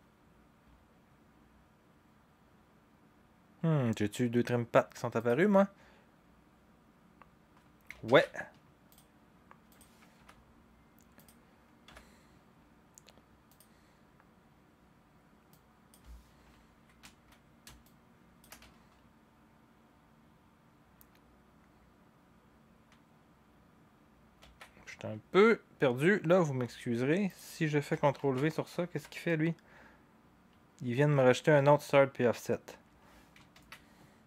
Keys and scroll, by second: 8.0 ctrl+z, 10.1 u, 11.9 u, 24.4 ctrl+c, 28.2 ctrl+v, 28.9 u, 33.5 ctrl+z.